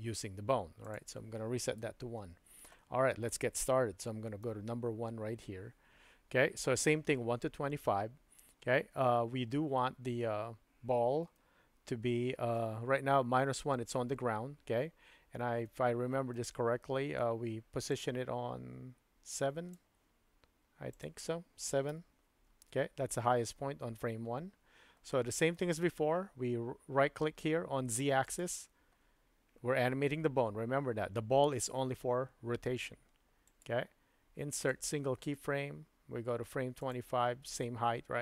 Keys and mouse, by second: 1.0-2.7 drag, 4.4 KP_1, 11.4-12.6 shift+middle drag, 15.6-16.5 shift+middle drag, 18.0-19.8 drag, 21.0-23.0 drag, 25.1-25.5 shift+middle drag, 28.3-29.5 right drag, 33.5-34.8 right drag, 36.8 click.